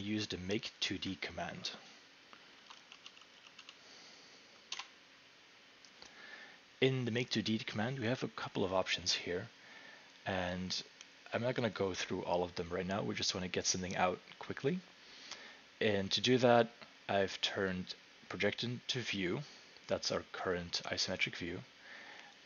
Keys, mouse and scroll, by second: 2.3-4.7 typing, 4.7 Return, 7.6 Return.